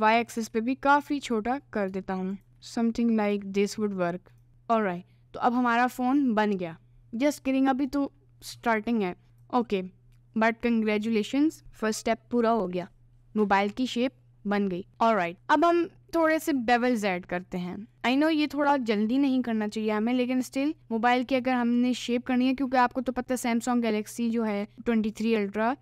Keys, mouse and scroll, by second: 0.2 s, 2.6 ctrl+s, 4.5 ctrl+s, 4.5-5.8 middle drag, 7.5 middle click, 9.4 click, 18.2 Tab, 21.6 middle click.